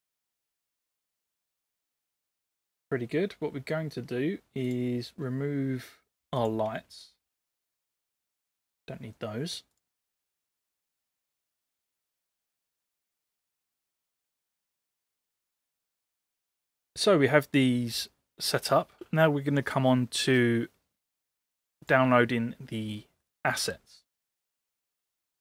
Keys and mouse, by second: 4.6 click, 7.4 shift+click, 8.3 Delete, 21.8 click.